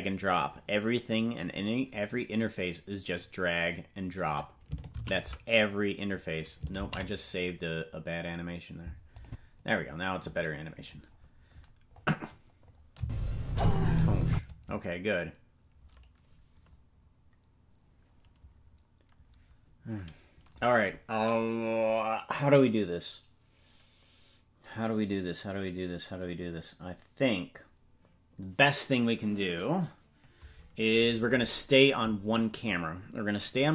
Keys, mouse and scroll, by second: 3.1 click, 7.2 ctrl+s, 7.7 ctrl+z, 9.2 click, 11.0-11.4 scroll down 1, 11.9-12.3 scroll down 2, 12.6-14.3 scroll up 4, 12.9 space, 14.3 space.